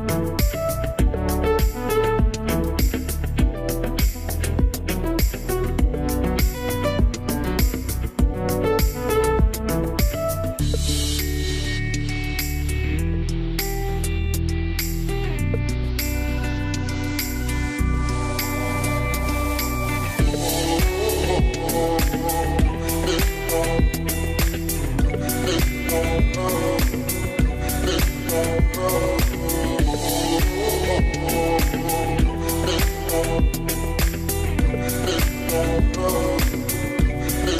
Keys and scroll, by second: 5.2 Right, 9.2 Right, 11.7 Right, 12.1 Left.